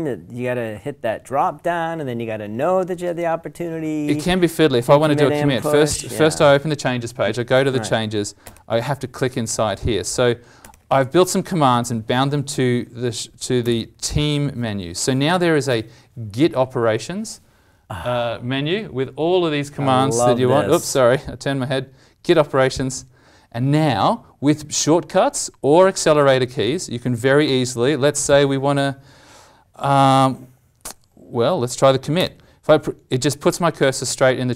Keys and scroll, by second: 13.6 alt+m, 32.3 alt+Home.